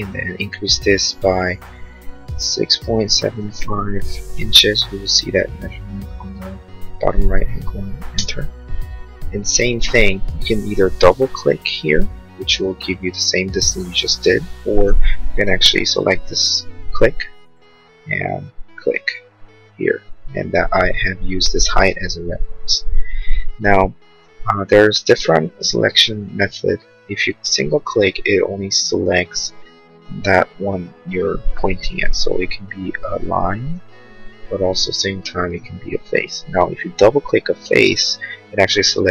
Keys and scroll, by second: 2.4 6, 2.9 Delete, 3.1 7, 3.4 5, 4.4 shift+', 8.1 Return, 14.9 ctrl+z, 25.0 space.